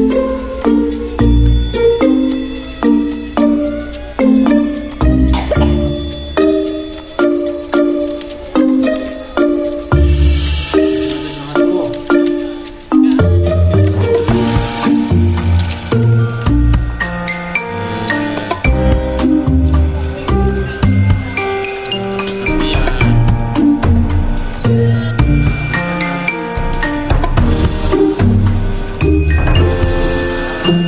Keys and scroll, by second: 10.3 F9, 14.0 ctrl+a, 15.2 Caps_Lock, 16.0 typing, 17.0-18.2 typing, 19.7-21.1 typing, 26.5-27.2 typing, 30.1 F9.